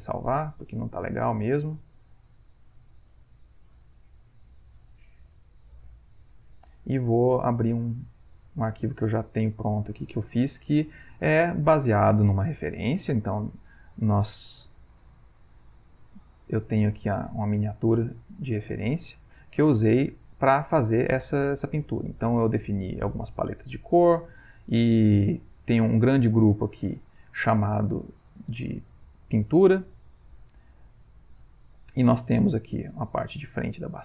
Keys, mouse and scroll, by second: 0.9 click, 2.5 click, 5.1 click, 6.3 click, 7.5 click, 10.4 middle click, 11.7 ctrl+middle click, 15.0-16.3 drag, 17.2 click, 18.1 middle click, 20.4 click, 22.1 click, 23.9 click, 25.5 click, 27.0 click, 30.2 click, 30.7 middle click, 32.4 click, 32.8 click.